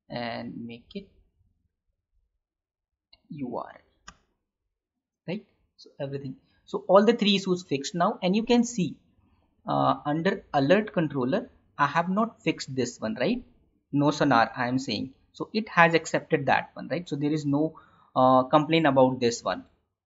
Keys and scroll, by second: 19.5 alt+Tab.